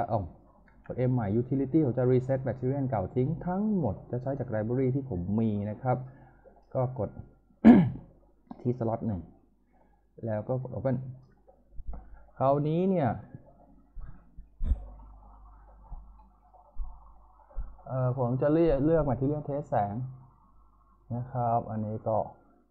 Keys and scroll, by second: 0.6 m.